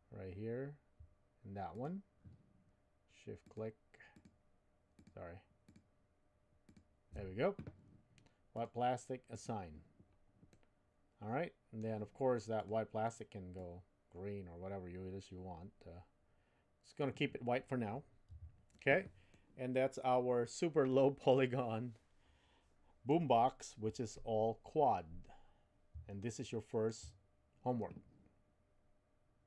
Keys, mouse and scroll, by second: 1.7 alt+shift+click, 4.1 alt+shift+click, 5.0 alt+shift+click, 5.6-6.7 alt+shift+drag, 8.5 click, 9.3 click, 10.5-11.8 middle drag, 18.3 Tab, 19.3-23.1 middle drag, 26.2-27.5 shift+middle drag.